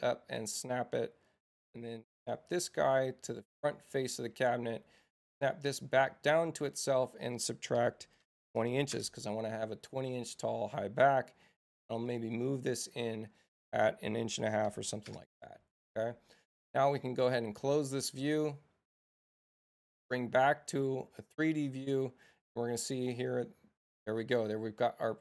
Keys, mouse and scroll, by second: 0.1-0.5 scroll down 1, 2.1 middle click, 2.4 click, 5.3-6.9 drag, 6.6 Return, 12.1-13.4 drag, 13.1 Return, 20.5 Tab, 24.4 click.